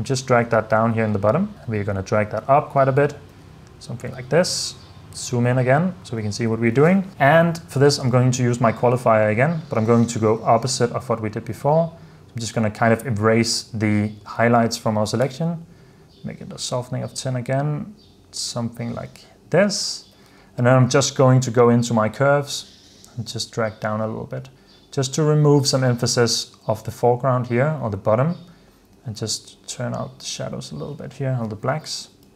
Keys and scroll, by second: 3.4 h, 14.8-15.8 typing, 20.2 h, 31.8 super+f.